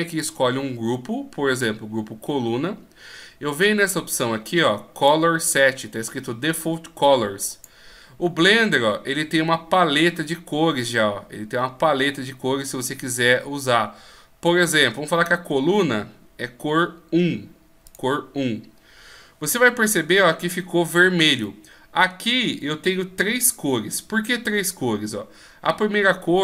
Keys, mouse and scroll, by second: 0.2 click, 4.2 click, 7.5 click, 21.4 middle click.